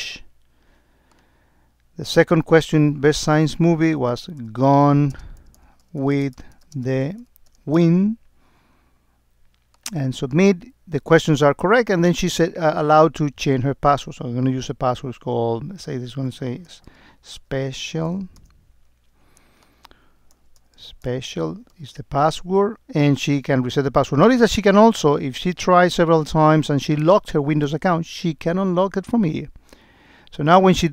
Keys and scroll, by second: 5.2 space, 6.2 space, 6.8 space.